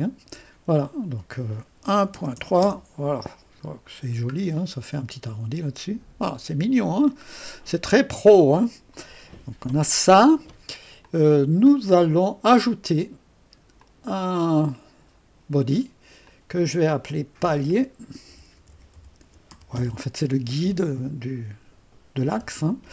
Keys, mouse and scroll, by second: 0.0 click, 2.1-3.8 typing, 3.6-4.1 scroll up 1, 4.1-4.6 scroll down 1, 4.6-7.7 drag, 4.9 typing, 6.8-7.6 typing, 7.9-9.3 drag, 11.0-12.6 drag, 13.8 click, 16.0-16.7 typing, 16.2 click, 17.4 F2, 18.0-20.0 typing, 22.7-22.9 typing.